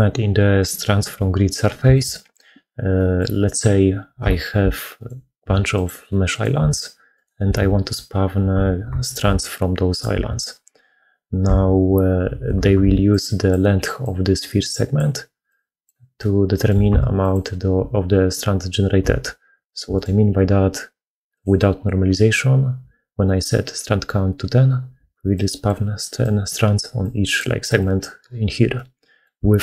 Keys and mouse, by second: 1.8 shift+click, 1.8 shift+middle click, 1.8 shift+right click, 2.8 click, 2.8 middle click, 2.8 right click, 4.5 h, 4.8 click, 5.3 Tab, 6.1 click, 6.4 4, 7.0 click, 7.3 4, 8.9 click, 9.1 4, 9.8 click, 10.0 4, 12.2 alt+a, 12.7-16.5 d, 15.3 click, 16.0 click, 16.7 Tab, 16.7 d, 19.4 alt+h, 19.8 click, 24.8-29.1 d, 28.6 click, 29.0 right click.